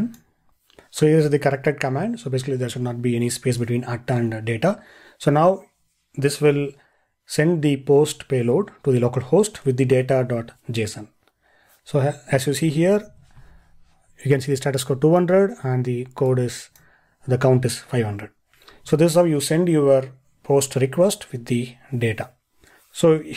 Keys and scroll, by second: 13.1 ctrl+e.